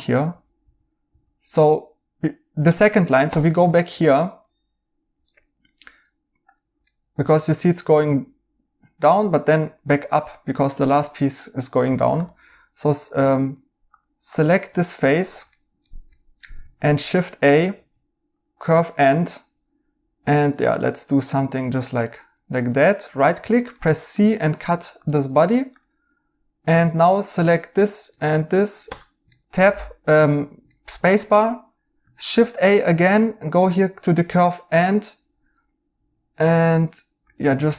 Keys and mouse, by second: 3.6 right click, 6.8 right click, 11.3 right click, 13.3 right click, 15.1 right click, 16.5 a, 17.7 ctrl+z, 22.6 right click, 23.8 c, 27.8 right click, 29.3 right click, 30.7 right click, 32.2 a.